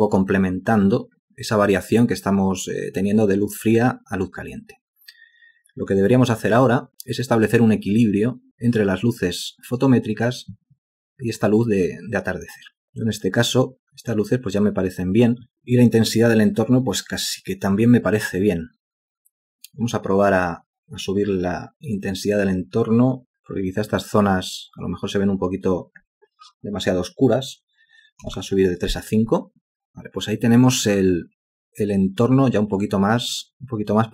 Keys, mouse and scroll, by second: 28.3 5, 28.4 Return.